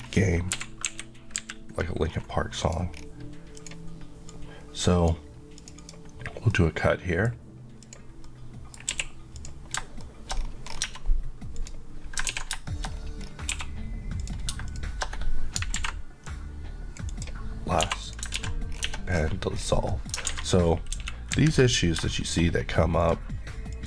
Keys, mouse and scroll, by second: 0.0 scroll down 1, 0.5 Escape, 0.9 KP_1, 1.4 KP_3, 2.2-2.7 scroll up 1, 2.7 click, 3.1-3.6 scroll up 1, 5.8 click, 6.6 middle click, 7.9 click, 8.3 middle click, 9.0 q, 9.4 click, 10.1 shift+middle click, 10.4 scroll up 1, 11.6 click, 12.3 ctrl+x, 12.7 shift+middle click, 12.9 scroll up 1, 13.6 1, 14.2 click, 14.7 shift+click, 16.3 click, 17.9 2, 18.1 click, 18.4 ctrl+x, 18.8 scroll down 1, 19.9 middle click, 20.3 alt+a, 21.0 KP_1, 21.4 KP_3, 22.2 shift+middle click, 22.5 scroll up 1, 23.0 click.